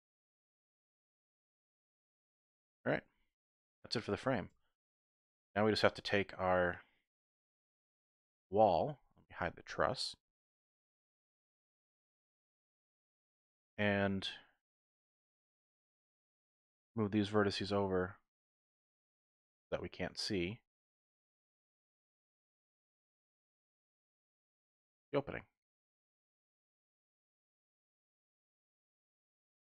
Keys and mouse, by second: 1.3 click, 1.6 Tab, 2.7 click, 3.2 shift+middle click, 4.0 middle click, 4.1 click, 4.5 Tab, 4.9 Tab, 5.1 click, 5.5 middle click, 5.8 Tab, 7.1 KP_1, 8.4 shift+middle click, 10.4 click, 12.3 1, 13.2 z, 14.2 click, 17.4-19.6 typing, 19.0 click, 20.3 click, 20.6-21.4 typing, 23.0-24.2 typing, 23.1 click, 26.4 click, 27.3 click.